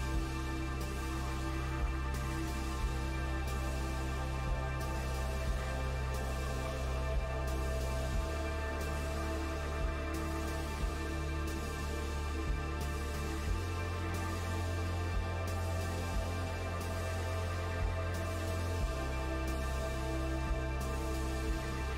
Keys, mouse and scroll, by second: 2.5 shift+middle click, 3.3-5.0 scroll up 3, 5.0-7.2 middle drag, 7.2 KP_1, 8.1 g, 12.0 scroll up 2, 12.2 shift+middle click, 12.8 click, 14.0 Tab, 15.0 Tab, 15.4 click, 15.8 click, 16.4 Tab, 16.7 click, 17.8 1, 18.1 click, 19.1 shift+s, 20.9 Tab, 21.2-21.8 scroll down 2, 21.7 click.